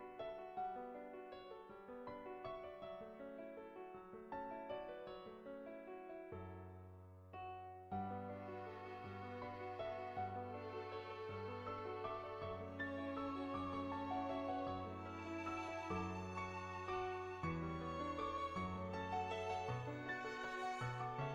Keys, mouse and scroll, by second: 0.1 click, 0.6 click, 1.0 click, 1.2 ctrl+z, 1.5 ctrl+z, 1.5 click, 2.4 click, 3.2 click, 4.1 click, 4.8 click, 5.2 click, 5.6 click, 6.2 click, 7.1 click, 7.5 ctrl+z, 7.7 click, 8.2-10.1 middle drag, 9.4 ctrl+z, 10.3 shift+middle click, 11.0 shift+middle click, 11.3 middle click, 11.8 shift+middle click, 12.3 middle click, 12.4-13.5 middle drag, 13.6 shift+click, 14.0-15.1 middle drag, 15.2 middle click, 15.5 middle click.